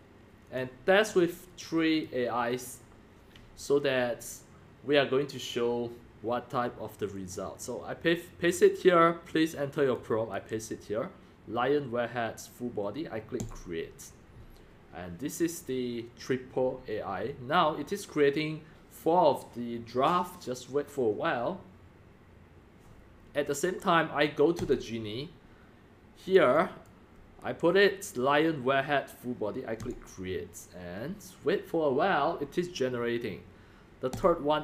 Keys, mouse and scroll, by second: 0.5 click, 1.1 click, 2.0 click, 2.9 click, 3.1-3.5 drag, 3.7-4.7 drag, 5.7 click, 6.9 click, 7.1 click, 7.3-8.7 drag, 9.8 click, 10.1 click, 10.3 ctrl+v, 13.5-15.2 drag, 17.5-18.6 drag, 24.6 click, 24.7 click, 26.1 click, 26.5 click, 27.4 ctrl+v, 28.1 click, 29.4 click, 29.9-30.8 drag, 31.0-34.1 drag.